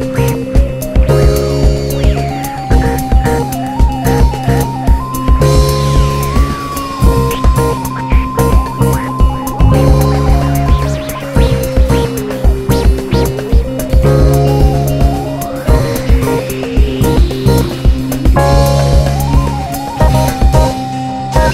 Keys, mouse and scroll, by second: 0.8 1, 0.9 click, 1.0 shift+click, 1.6 alt+m, 2.0 2, 2.2 click, 3.0 f, 3.5 scroll down 1, 3.7 `, 4.8 click, 5.0 shift+click, 5.2-8.0 typing, 5.5 click, 5.6 shift+click, 6.0 click, 6.8 click, 7.0 shift+click, 7.9 scroll up 1, 8.2 click, 9.4 `, 11.7 `, 12.1 2, 12.3 scroll up 1, 12.6 click, 13.0 f, 13.6 `, 15.3 click, 16.2-16.5 scroll down 1, 16.9 `, 17.9-18.2 scroll up 1, 18.2 `, 18.8 shift+click, 19.0 `, 20.3 click, 20.7 e.